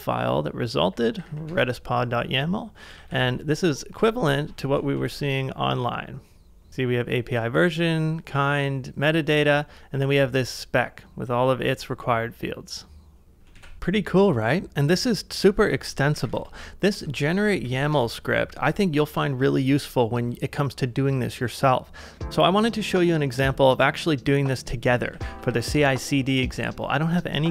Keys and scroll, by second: 0.9 j, 2.9 ctrl+a, 4.9 super+Tab, 13.5 super+Tab, 16.3 ctrl+w, 16.3-18.1 typing, 25.0-26.0 typing, 26.5 Return.